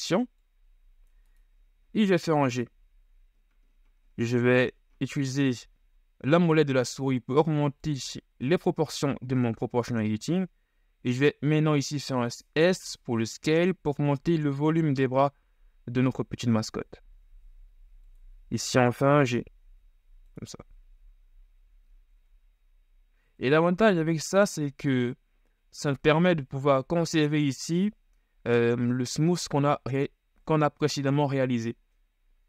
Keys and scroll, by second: 2.6 shift+g, 9.1 s, 19.0 g, 26.8 shift+z.